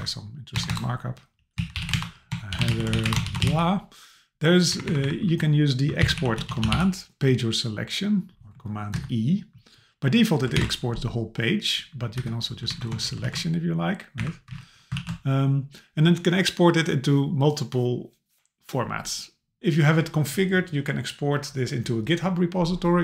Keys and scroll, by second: 0.5 Return, 1.9 Return, 3.1 Return, 4.7 Up, 5.3 Down, 6.0 super+/, 8.9 Escape, 10.6 super+e, 12.2 Escape, 12.7 super+Left, 13.2 super+a, 14.2 Up, 14.5 Down, 15.0 super+e.